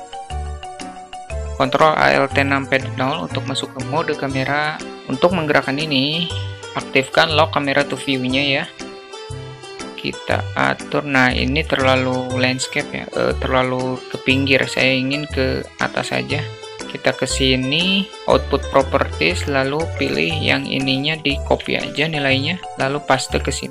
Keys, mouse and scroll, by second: 2.1 shift+a, 2.8 ctrl+a, 3.2 ctrl+a, 6.6 q, 9.0-9.5 shift+middle drag, 10.4-11.6 shift+middle drag, 16.5 click, 20.8-22.5 drag, 23.0-23.7 ctrl+drag.